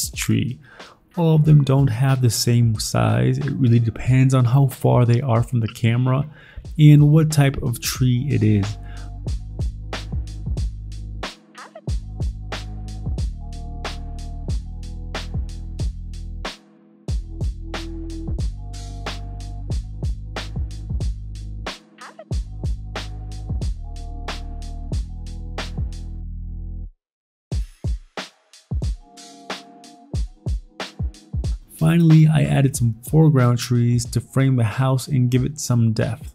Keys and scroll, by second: 0.2 alt+Tab, 3.2 ctrl+z, 3.6 alt+Tab, 15.4 alt+Tab, 18.9 alt+Tab, 20.6 alt+Tab, 22.2 ctrl+t, 22.2 Escape, 23.4 ctrl+t, 25.3 ctrl+j, 25.4 ctrl+t, 31.6 alt+Tab, 32.1 Delete, 32.1 alt+Tab, 32.7 Escape, 32.7 alt+Tab, 33.5 b, 34.0 alt+Tab, 34.7 alt+Tab, 35.1 Delete, 35.1 alt+Tab, 36.2 alt+Tab.